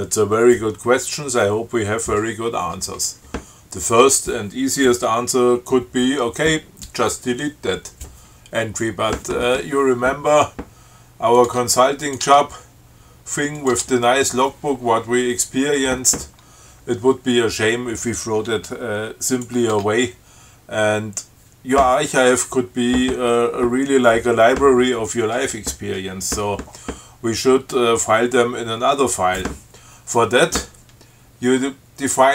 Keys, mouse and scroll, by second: 11.6 click, 11.7 Tab, 12.3 click, 12.5 Tab, 13.8 click, 14.0 Tab, 19.6 click, 20.0 Tab.